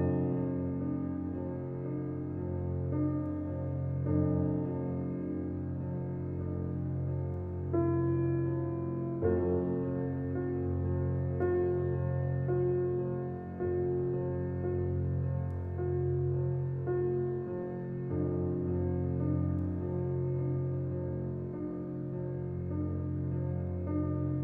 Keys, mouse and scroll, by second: 0.2 shift+click, 0.5 shift+click, 1.4 shift+click, 2.0 scroll up 1, 2.4-3.0 shift+middle drag, 3.0 shift+click, 4.4 shift+click, 5.1 ctrl+click, 6.3 shift+d, 7.6-8.0 middle drag, 8.0 s, 9.5 shift+d, 10.8 s, 11.5 scroll down 2, 11.8-12.5 middle drag, 12.7-14.4 middle drag, 14.4 shift+d, 15.6 s, 16.6 click, 16.8 scroll down 1, 17.0-19.7 middle drag, 19.7 click, 21.9-22.5 scroll down 1, 22.5-23.5 middle drag, 23.5 click.